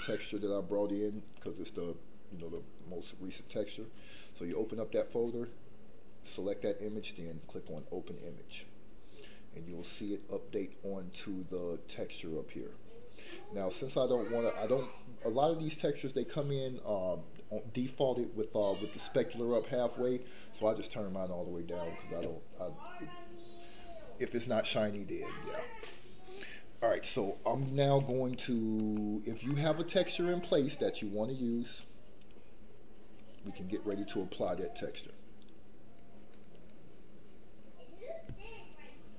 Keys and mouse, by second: 20.3 click, 27.8 middle click, 29.0 shift+middle click, 29.5 middle click, 30.4-31.7 middle drag.